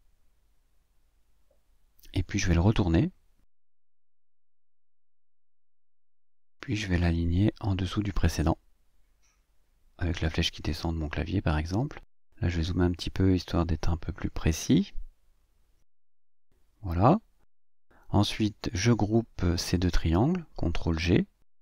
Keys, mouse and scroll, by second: 2.8 ctrl+d, 6.0 click, 7.7 click, 8.6 click, 9.7 Down, 13.5-13.8 ctrl+scroll up 2, 14.0 ctrl+scroll up 2, 15.6 Down, 16.8-17.4 scroll down 1, 17.8 click, 19.0 click, 19.9 shift+click.